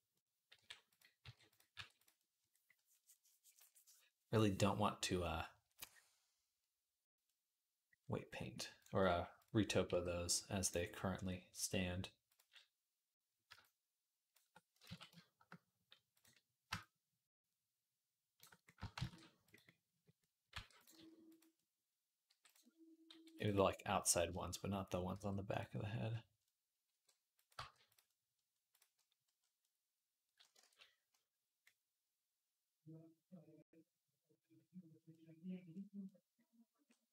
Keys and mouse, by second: 0.0-1.6 typing, 2.3-4.8 drag, 4.2 r, 7.1 middle click, 7.5 middle click, 8.3 click, 8.4 middle click, 8.6 click, 8.9-12.1 middle drag, 9.7 g, 12.1-19.5 drag, 14.7 ctrl+z, 18.8 shift+d, 19.5 middle click, 20.0 middle click, 20.3 r, 20.7 s, 21.7 middle click, 21.9-23.5 drag, 22.1 g, 23.2 g, 23.5 middle click, 24.0 middle click, 24.1 shift+click, 24.4 middle click, 24.7-27.4 middle drag, 25.0 g, 26.7 r, 27.4 g, 29.1 click, 29.6 click, 29.9 click, 30.5 ctrl+s, 31.5-35.1 middle drag, 35.2 click, 36.9 click, 37.0 middle click.